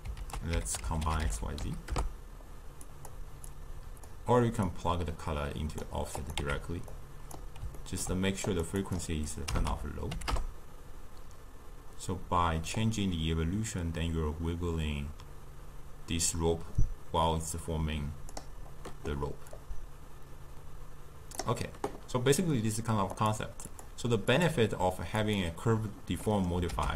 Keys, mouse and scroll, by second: 0.3 ctrl+a, 3.6 click, 4.7-6.3 drag, 6.4 x, 7.0 click, 7.8 ctrl+middle click, 8.5 click, 8.8-12.0 drag, 12.8-16.0 drag, 19.6-22.6 drag, 23.2-25.4 drag, 26.3 middle click, 26.8 ctrl+a.